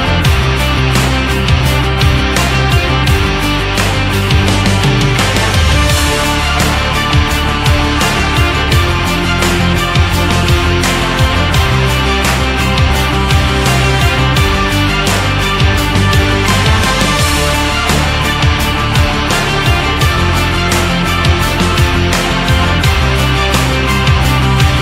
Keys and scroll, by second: 10.7 shift+Down, 12.2 shift+Up, 13.0 Up, 14.7 Down, 15.5 Up, 15.8 Down, 17.0 Up, 19.3 Down, 20.7 Up.